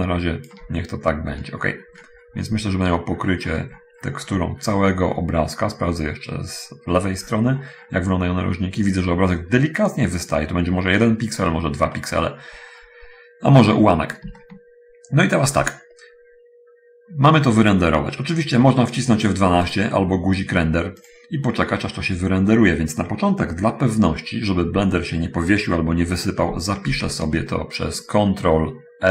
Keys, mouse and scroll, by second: 1.2-2.9 shift+scroll down 1, 3.1-4.8 scroll up 1, 6.6-8.6 scroll up 1, 11.6-13.6 scroll up 2, 14.0-14.6 scroll up 1, 14.7 shift+middle click, 21.4 click, 27.2 ctrl+s.